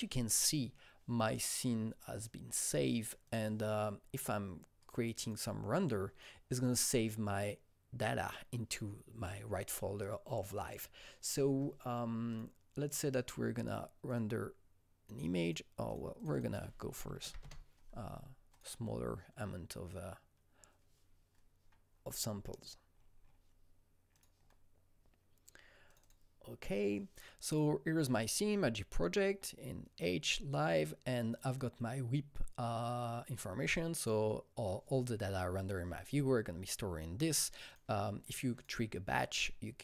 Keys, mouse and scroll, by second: 0.4 Return, 0.4 click, 0.4 typing, 2.1 click, 3.2 click, 4.8 click, 5.2 click, 12.3 click, 14.0 click, 15.4 click, 16.1 click, 17.0 KP_1, 17.2 KP_6, 17.4 KP_Enter, 18.5 click, 21.9-22.9 scroll down 3, 22.9-24.1 scroll up 4, 24.1 click, 25.8 click, 26.0 double click, 26.6-31.1 drag, 31.3-36.1 drag, 37.6 click, 38.5 click, 39.3 click.